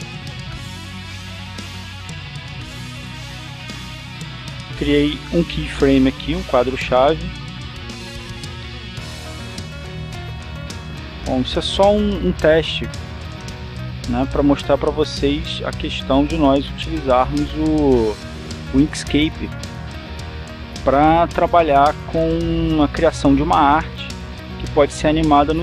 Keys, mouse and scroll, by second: 1.3 ctrl+z, 2.0-3.0 drag, 3.3 click, 8.0 click, 9.6 click, 10.7-15.5 drag, 15.8 click, 16.7-20.6 drag, 21.3-25.6 drag.